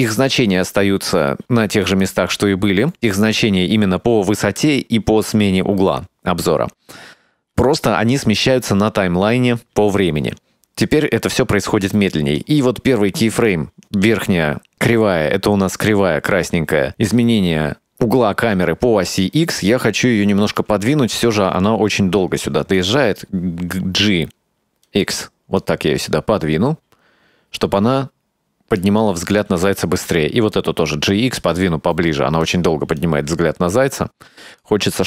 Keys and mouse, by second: 12.5-13.6 right drag, 15.3-20.1 drag, 22.9 g, 25.7-28.9 drag, 29.4 right click, 30.0 g, 33.1-34.7 drag.